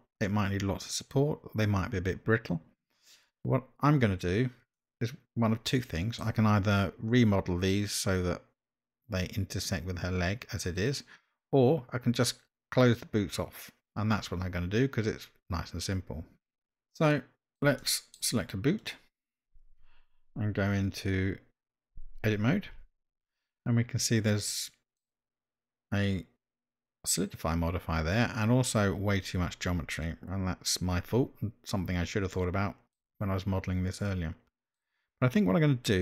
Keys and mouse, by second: 4.8-6.2 middle drag, 16.9-17.6 middle drag, 17.8-18.1 shift+middle drag, 18.8 click, 22.9 Tab, 24.5 middle click, 32.3 shift+middle click, 34.0 middle click.